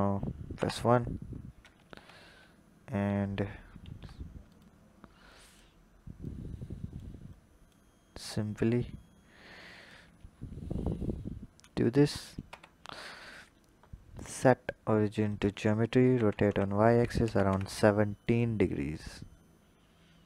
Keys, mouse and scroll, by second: 0.3 KP_1, 1.7 Tab, 3.7 s, 5.1 click, 6.1 click, 7.1 click, 8.1 click, 9.9-10.8 scroll up 4, 11.6 click, 12.3 Tab, 14.0-16.0 drag, 16.0 r, 19.1 click.